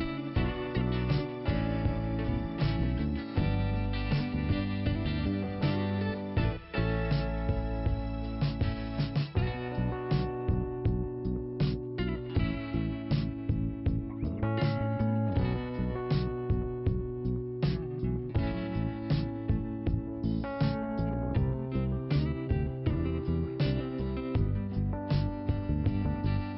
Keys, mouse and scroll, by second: 0.2 click, 2.3 click, 7.7 click, 12.2 scroll down 2, 14.7 click, 14.8 click, 17.6 click, 19.4 click, 19.7 click, 20.4 scroll down 2, 20.8 middle click, 23.8 click.